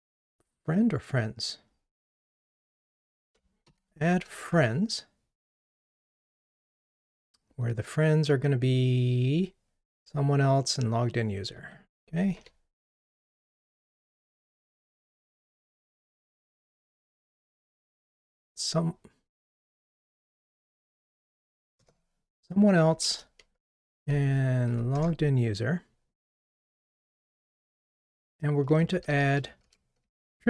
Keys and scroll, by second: 12.4 super+c, 18.5 super+v, 20.7 shift+super+v.